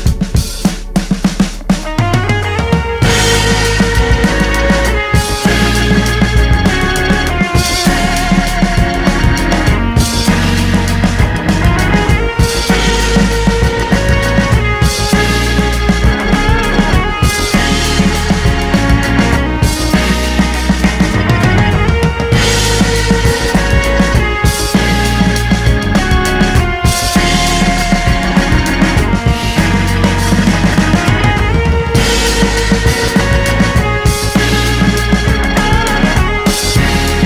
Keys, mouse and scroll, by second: 0.2 middle click, 0.8 click, 1.4 middle click, 1.5 scroll down 2, 1.6 middle click, 2.3 scroll up 1, 2.6-11.8 middle drag, 11.8 click, 12.0 middle click, 12.1 scroll down 1, 12.2-13.6 middle drag, 13.6 shift+a, 13.8-14.2 scroll down 1, 14.2 KP_1, 14.7 z, 14.8-15.2 scroll up 2, 15.2 s, 16.0-17.3 shift+middle drag, 17.3 s, 20.4 KP_1, 21.2 g, 22.2 middle click, 22.6 g, 23.4 middle click, 23.6 scroll up 1, 23.7 middle click, 24.4 g, 25.0-30.7 middle drag, 30.7 s, 31.6 KP_1, 32.1 g, 33.6 middle click, 34.1 s, 35.1-36.1 middle drag.